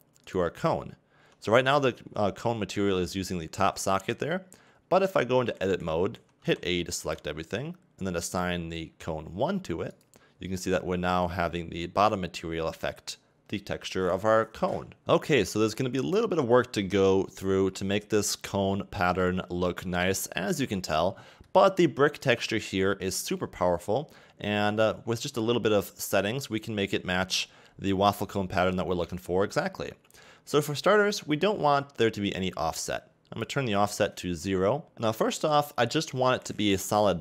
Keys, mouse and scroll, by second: 0.3 right click, 1.3 Tab, 2.5 a, 6.1 a, 6.4 a, 7.0 a, 10.0 click, 10.6 Tab, 15.0-15.7 scroll up 2, 15.7-16.2 scroll down 2, 16.2 middle click, 32.3 click, 34.8 scroll up 1, 34.9 click.